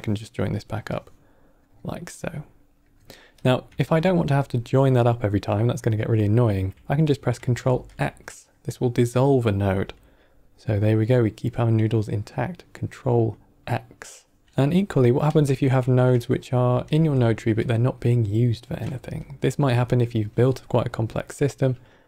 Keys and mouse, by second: 0.8-1.5 drag, 2.0 click, 3.3 click, 3.7 shift+d, 4.9 click, 7.6 ctrl+x, 15.2 ctrl+z, 15.9 click, 16.3 click, 16.7 shift+d, 19.2 ctrl+middle click.